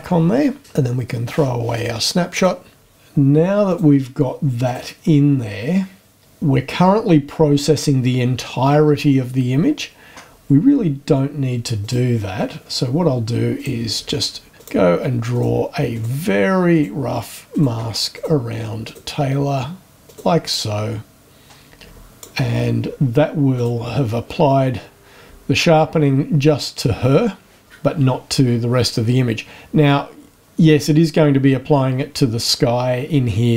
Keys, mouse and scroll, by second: 0.6 click, 1.7 click, 2.3 click, 3.6 click, 4.6 click, 8.9-10.5 scroll down 7, 11.8 click, 13.6 click, 14.6 click, 15.3 click, 15.9 click, 16.7 click, 17.5 click, 18.1 click, 18.8 click, 20.0 click, 21.7 click, 23.5 click, 24.2 scroll up 1, 29.5-30.0 scroll down 1.